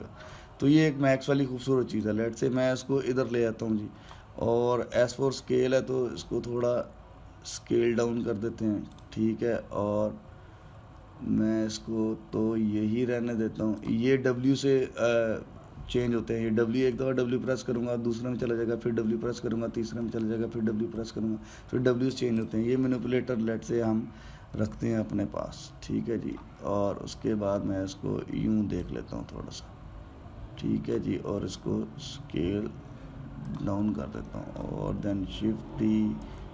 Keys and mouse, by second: 1.1 ctrl+z, 2.8 click, 5.7 s, 10.0 w, 10.7 w, 12.8 w, 13.3 w, 14.6 click, 16.8 w, 17.7 w, 20.8 w, 21.8 w, 23.1 click, 25.3-29.5 ctrl+middle drag, 29.5 click, 32.1 s, 34.9 alt+middle click, 35.7 shift+d.